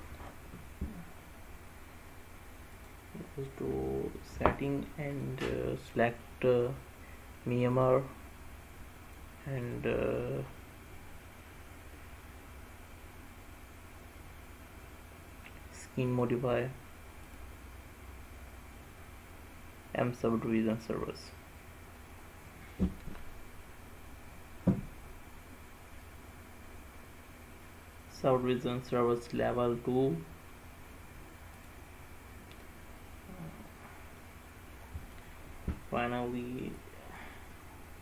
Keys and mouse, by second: 5.2-8.0 drag, 9.7-16.4 drag, 17.4-21.0 drag, 31.7 click, 34.3 middle click, 36.9 click.